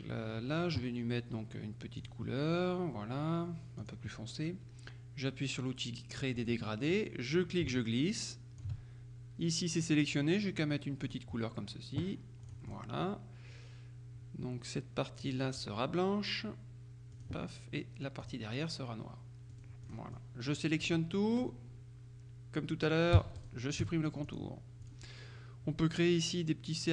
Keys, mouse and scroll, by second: 2.1 click, 3.9 click, 6.4 click, 7.4-9.2 drag, 11.1 click, 12.5 click, 15.3 click, 17.2 click, 18.3 click, 19.6 click, 23.5-24.9 shift+drag.